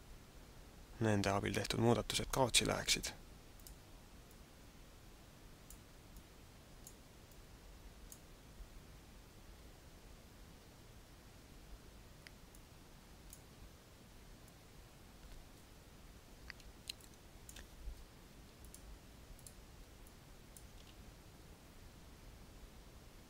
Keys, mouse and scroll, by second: 3.5 click, 4.2 click, 6.0 click, 7.3 click, 12.5 click, 15.9-16.3 scroll up 3, 16.9 shift+middle click, 18.7 click, 19.3 click, 20.1 click, 20.7 alt+a.